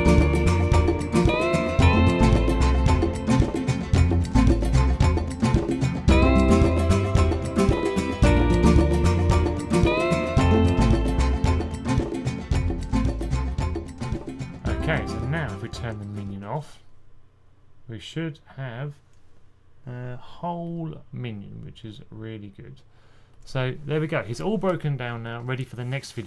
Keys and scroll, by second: 0.2 super+z, 0.3-1.4 typing, 2.6-4.6 typing, 6.1-8.5 typing, 11.5 typing.